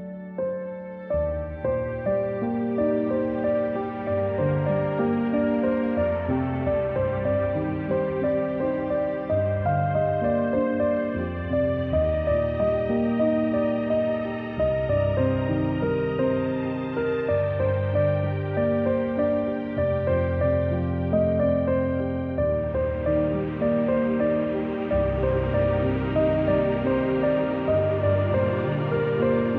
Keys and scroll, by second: 0.1 c, 3.9-7.2 typing, 8.7 =, 9.8 a, 11.6 z, 12.3-12.7 space, 12.9 a, 20.2-22.9 typing, 25.0 v, 25.4 a, 26.8 c, 28.5 a.